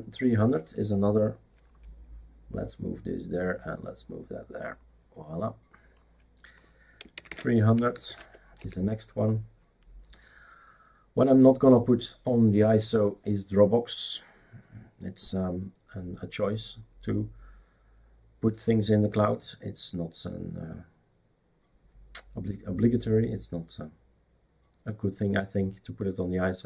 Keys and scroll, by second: 6.9-8.5 typing, 8.6 Return.